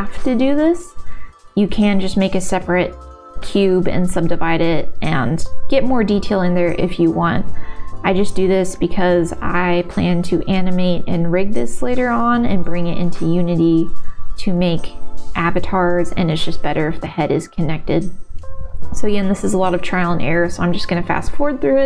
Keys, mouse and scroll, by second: 1.0 s, 2.5 middle click, 2.9 middle click, 4.1 g, 4.6 click, 4.8 middle click, 5.7-6.8 middle drag, 7.2 alt+click, 8.0 e, 9.5 s, 10.2 middle click, 11.0-12.6 middle drag, 12.7 g, 13.2 middle click, 13.8 e, 14.9 middle click, 15.0 click, 15.2 middle click, 15.8 middle click, 15.8 g, 16.7 ctrl+s, 17.0 middle click, 17.1 click, 17.5 click, 17.7 g, 18.3 e, 18.8 e, 19.1 s, 19.3 middle click, 19.7 shift+middle click, 19.9 shift+click, 20.3 g, 20.7 middle click, 21.4 g.